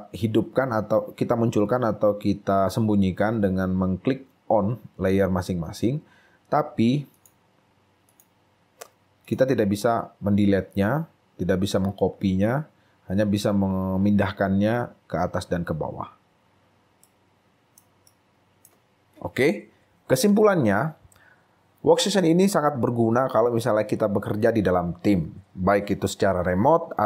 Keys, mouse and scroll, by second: 17.2 right click, 18.1 right click.